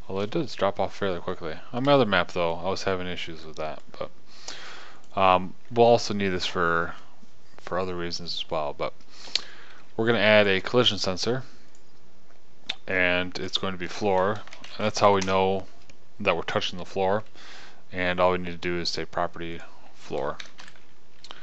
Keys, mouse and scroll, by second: 0.9 KP_0, 19.9-21.4 drag.